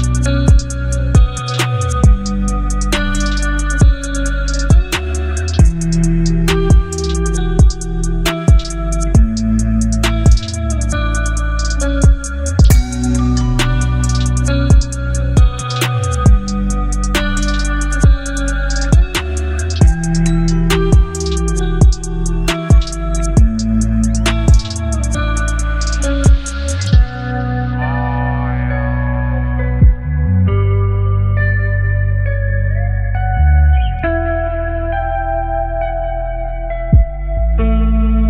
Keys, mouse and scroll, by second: 1.1 click, 2.4 right click, 3.1-5.0 drag, 18.7 alt+scroll up 1, 19.5 space, 19.8-20.2 click, 20.0 space, 20.6-21.3 click, 21.0 space, 23.0 ctrl+0, 24.6-27.4 drag, 30.0 ctrl+j, 31.4 ctrl+t, 33.9-36.4 shift+click, 37.4-38.2 shift+drag.